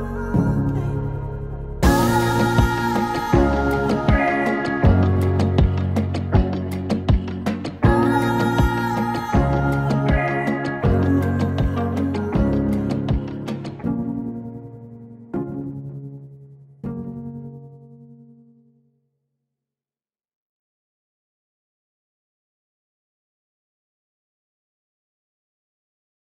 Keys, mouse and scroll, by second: 1.0 r, 2.7-3.9 typing, 5.0 click, 6.7 space, 13.8 click.